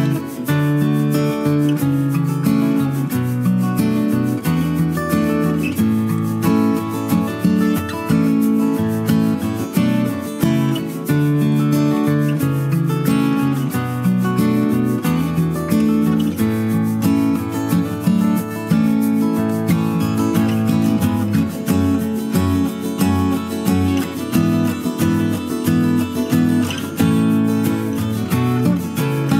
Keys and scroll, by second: 5.6 ctrl+c, 7.6 Delete, 13.4 Right, 14.1 Up, 14.2 Left, 29.2 ctrl+z.